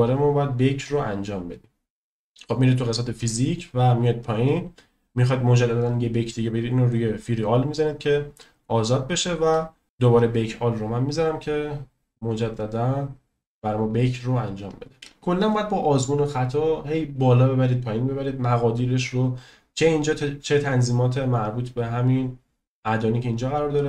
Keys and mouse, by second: 0.9 click, 6.8 click, 9.8-19.6 drag.